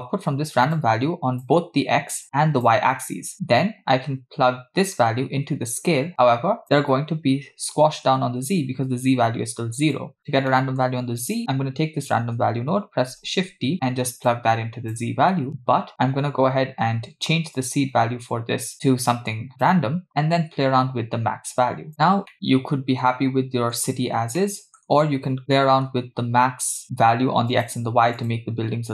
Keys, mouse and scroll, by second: 0.8-1.5 drag, 2.2 click, 3.3 click, 5.0 click, 5.2-6.6 drag, 8.3-9.9 scroll up 2, 9.9 click, 10.6 middle click, 11.3 click, 13.2 shift+d, 14.3-15.0 drag, 15.3 middle click, 15.9-16.6 scroll up 4, 17.6-19.7 drag, 20.1-21.9 drag, 22.3-23.8 middle drag, 24.4 middle click, 25.4 scroll down 2, 25.6 middle click, 27.6 click, 28.2 click.